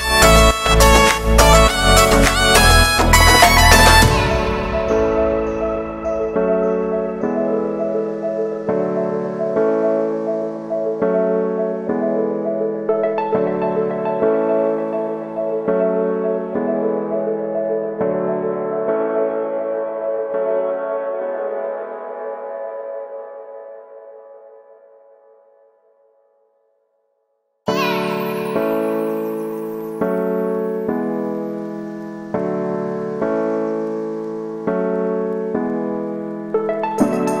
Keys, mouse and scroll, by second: 0.4 click, 0.5 z, 0.7 b, 3.5 middle click, 3.7 scroll up 3, 3.9 g, 4.6 shift+n, 5.0-5.5 scroll down 3, 5.2 shift+middle click, 5.5 Tab, 5.7 middle click, 6.0 scroll down 3, 6.1 shift+middle click, 6.5 scroll down 1, 6.6 middle click, 7.1 a, 7.2 a, 8.3 shift+middle click, 8.6 scroll up 1, 8.9 right click, 9.1 Tab, 9.8 click, 9.9 middle click, 10.1-10.4 scroll up 1, 10.4-11.4 right drag, 11.4 shift+middle click, 11.9 shift+d, 13.0 s, 14.1 scroll up 1, 14.3 shift+middle click, 14.7-15.0 scroll up 1, 15.0 ctrl+r, 16.2-17.3 alt+shift+right drag, 17.3 ctrl+b, 19.0 click, 19.6 right click, 19.9 x, 20.2 right click, 20.3 l, 20.7 middle click, 21.1 e, 21.7 middle click, 22.1 right click, 22.2 l, 23.4 shift+n, 24.0 shift+middle click, 24.4 scroll up 1, 24.6 right click, 25.2 shift+d, 25.7 e, 27.5 l, 27.5 g, 27.9 g, 28.8 right click, 28.9 scroll down 1, 29.1 shift+middle click, 29.5 scroll up 1, 29.7 e, 30.2 ctrl+z, 30.3 g, 31.1-32.1 shift+middle drag, 32.1 scroll down 1, 32.3 middle click, 32.6 e, 33.8 g, 34.7 shift+middle click, 35.1 e.